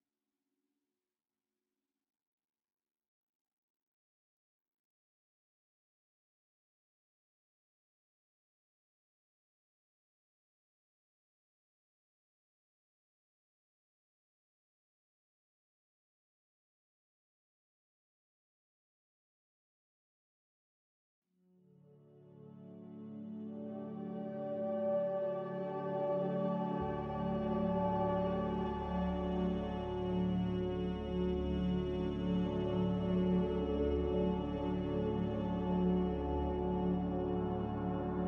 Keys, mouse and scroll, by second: 10.0 ctrl+z, 10.4 ctrl+z, 16.9 m, 29.3 a, 38.0 m.